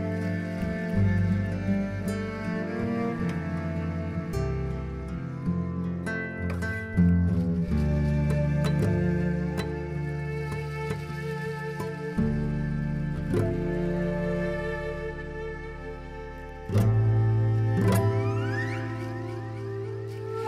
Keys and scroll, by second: 2.7 ctrl+alt+1, 3.1 ctrl+alt+1, 3.2 b.